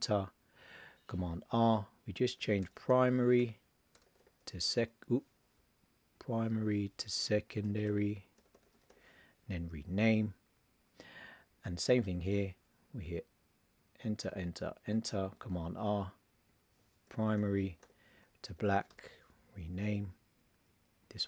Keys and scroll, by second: 1.3 super+r, 2.6 shift+p, 7.6 shift+s, 15.5 super+r, 17.0 shift+p, 18.5 shift+b.